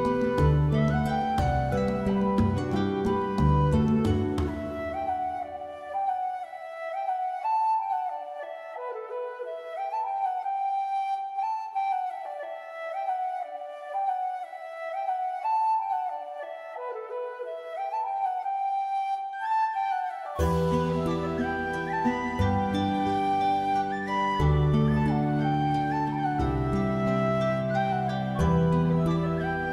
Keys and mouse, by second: 0.1 e, 0.7 click, 0.9 s, 1.3 click, 1.5 shift+middle click, 2.1 alt+click, 2.3 shift+click, 2.5 alt+z, 2.6 click, 2.9 click, 3.2 alt+click, 4.6 3, 5.5 s, 7.2 click, 7.3 alt+middle click, 7.6 alt+middle click, 8.6 ctrl+s, 9.5 middle click, 9.9 middle click, 10.4 alt+middle click, 10.7 alt+middle click, 10.9 shift+middle click, 11.1 alt+middle click, 11.4 1, 12.1 s, 12.1 middle click, 13.1 click, 13.6 s, 14.0 click, 14.3 shift+middle click, 14.8 shift+middle click, 15.0 middle click, 15.3 alt+middle click, 15.4 alt+middle click, 15.8 middle click, 16.8 click, 17.1 alt+middle click, 17.2 alt+middle click, 17.4 alt+z, 17.6 shift+middle click, 18.0 g, 19.1 click, 19.5 alt+z, 20.0 3, 20.1 click, 20.3 g, 20.7 click, 21.1 middle click, 21.9 shift+middle click, 22.1 middle click, 22.5 r, 22.7 click, 22.9 middle click, 23.8 middle click, 23.9 middle click, 24.2 shift+middle click, 24.7 shift+middle click, 25.0 shift+middle click, 25.3 Tab, 25.5 shift+middle click, 25.9 Tab, 26.4 alt+click, 26.8 g, 27.2 right click, 27.3 s.